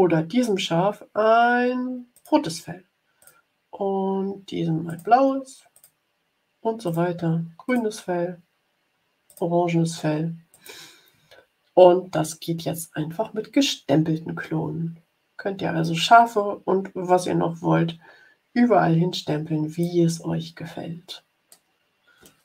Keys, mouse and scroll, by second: 2.1 click, 3.1 click, 4.8 click, 5.7 click, 6.9 click, 7.6 click, 9.2 click, 10.5 click, 15.7-19.9 drag, 21.4-22.4 drag.